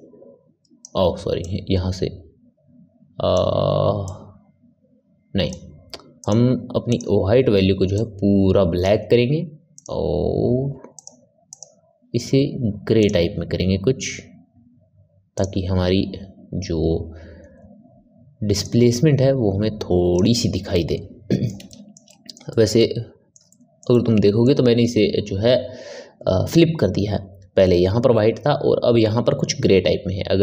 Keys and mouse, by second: 1.3-6.9 drag, 9.7 click, 10.9 click, 18.5-20.7 drag, 20.7-26.9 ctrl+middle drag.